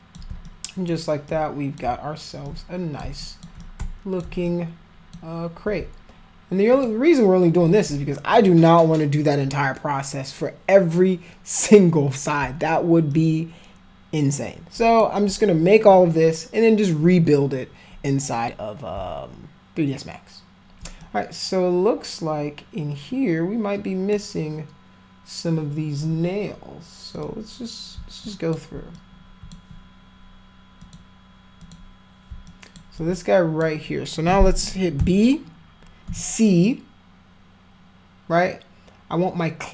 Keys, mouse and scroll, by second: 0.4 alt+click, 1.2 click, 2.4 alt+click, 3.2 alt+click, 3.6 shift+click, 4.4 alt+click, 6.7 alt+click, 13.1-15.0 alt+drag, 21.0-24.2 drag, 27.2 click, 28.3 alt+click, 29.0 click, 30.9 click, 31.7 click, 32.5 alt+click, 33.0 alt+click, 35.0 b, 36.1 c.